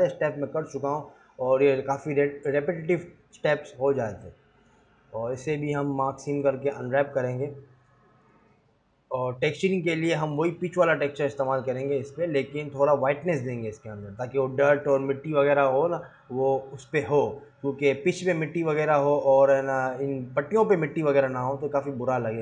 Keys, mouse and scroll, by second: 5.5 click, 5.7 scroll down 1.